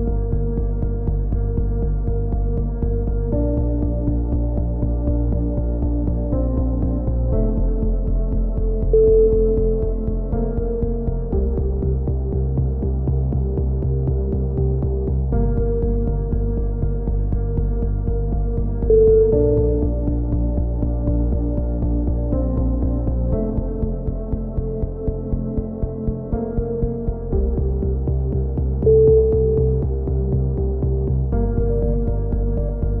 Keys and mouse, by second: 0.0-1.9 drag, 3.2 a, 3.4 z, 4.0 Tab, 5.8-7.7 middle drag, 7.9 middle click, 7.9 z, 8.4 Tab, 8.6 z, 9.2 z, 11.3 middle click, 11.6-12.7 middle drag, 12.7 k, 18.2 middle click, 19.0 click, 19.0 right click, 20.5 click, 21.0 click, 22.0 middle click, 22.3 click, 22.7 middle click, 23.5 click, 24.2 right click, 25.2 click, 26.6 a, 26.9 middle click, 27.4 click, 30.6 click, 31.1 middle click, 31.6-33.0 right drag.